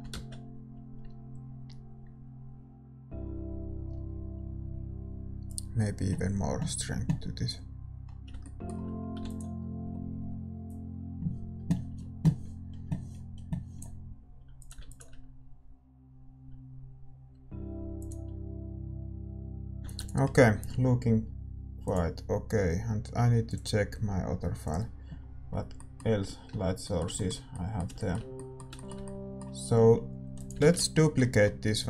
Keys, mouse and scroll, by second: 1.5 shift+z, 9.2 ctrl+s, 12.4-20.2 drag, 14.8 ctrl+s, 20.2 ctrl+s, 24.6 ctrl+s, 30.3-31.8 drag, 30.6 shift+z, 30.8-31.8 middle drag.